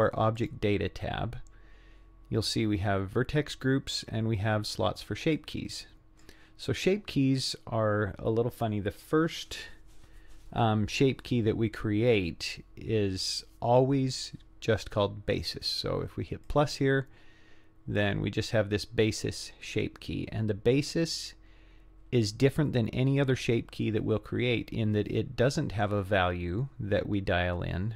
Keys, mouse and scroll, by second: 0.4 click, 5.4 click, 16.4 click.